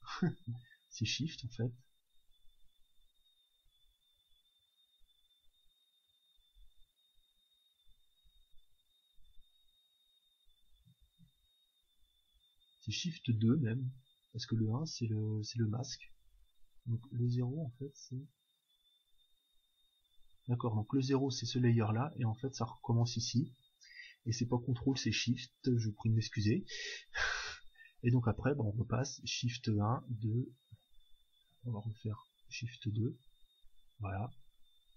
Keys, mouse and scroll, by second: 1.4 shift+2, 2.9 shift+3, 4.4 shift+1, 4.7 shift+1, 6.0 alt+1, 6.5 alt+2, 6.9 alt+3, 8.2 1, 10.0-11.8 drag, 11.6 shift+2, 17.5 0, 18.3 0, 19.8-21.6 drag, 33.2 shift+2, 34.8-34.9 drag.